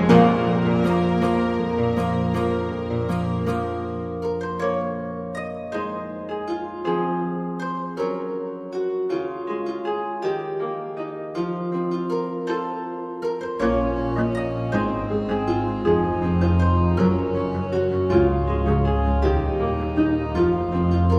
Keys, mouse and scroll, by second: 0.1 r, 4.1 r, 5.2 middle click, 6.3 click, 6.3 1, 7.2 g, 9.0 a, 9.1 middle click, 9.1 a, 11.2 Tab, 12.1 g, 14.3 a, 14.5 middle click, 14.5 a, 17.5 shift+middle click, 18.8 middle click, 19.4 shift+right click, 20.1 a.